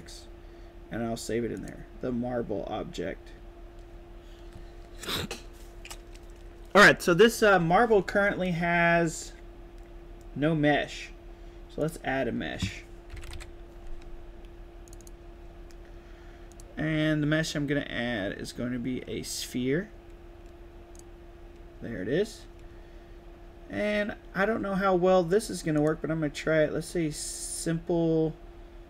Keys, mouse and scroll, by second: 1.5 click, 11.7 click, 12.8-13.7 typing, 14.8 click, 16.4 click, 20.9 click, 25.7 click.